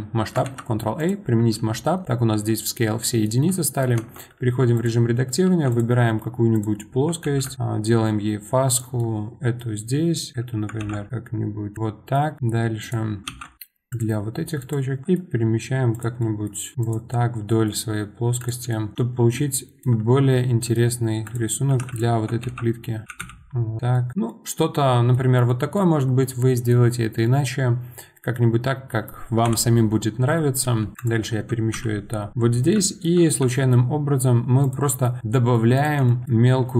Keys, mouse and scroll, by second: 0.4 ctrl+a, 3.0-3.9 middle drag, 3.9 Tab, 4.2-4.7 scroll up 1, 4.7 click, 5.4 2, 5.7 click, 6.5 click, 7.2 ctrl+b, 10.3 click, 10.8 ctrl+b, 12.8 click, 13.3 ctrl+shift+b, 14.7 click, 15.0 middle click, 15.9 click, 16.2 middle click, 16.7 g, 17.1-18.4 middle drag, 18.4 click, 18.7 shift+middle click, 19.0-19.5 scroll up 3, 19.5 shift+middle click, 20.0-20.3 scroll up 1, 20.3 middle click, 21.2 click, 21.6 g, 21.9 click, 22.4 ctrl+shift+b, 23.0 g, 23.9 middle click, 24.1 scroll down 2, 24.3-25.8 middle drag, 25.8 scroll down 2, 26.2-29.4 middle drag, 29.4 KP_7, 30.1 scroll down 1, 30.3-30.8 shift+middle drag, 30.8 g, 32.3-32.8 scroll up 5, 32.8-33.2 shift+middle drag, 34.9 middle click, 35.1 scroll down 2, 35.3-35.7 middle drag, 35.7 click, 36.0-36.7 shift+middle drag.